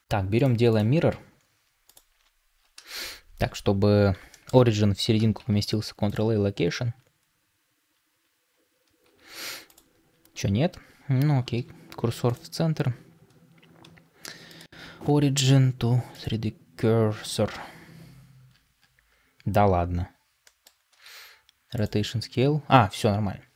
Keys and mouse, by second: 4.2 shift+middle drag, 16.1-17.9 right drag, 20.3 middle click.